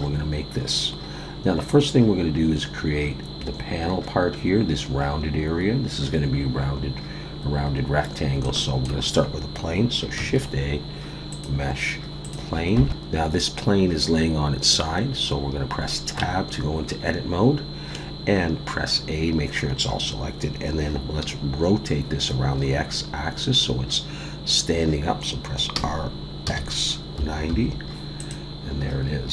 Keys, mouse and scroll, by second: 0.2-0.5 scroll up 1, 7.6-8.3 scroll down 2, 8.4 shift+middle click, 10.2 shift+a, 12.9 Tab, 12.9-13.5 scroll down 2, 16.2 Tab, 17.9 a, 21.3-24.5 scroll up 2, 25.7 r.